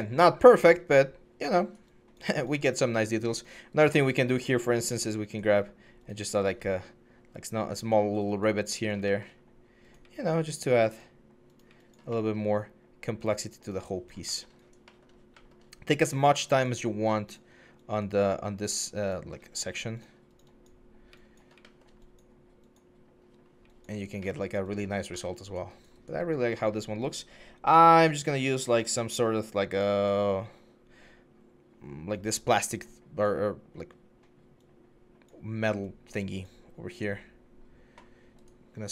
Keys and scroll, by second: 17.2 4, 23.0 1.